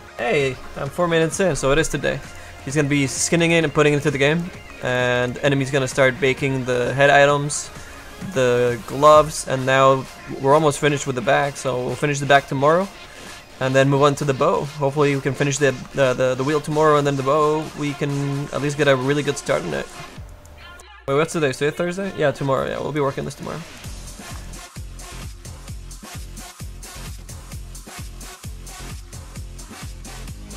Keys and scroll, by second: 15.3 w.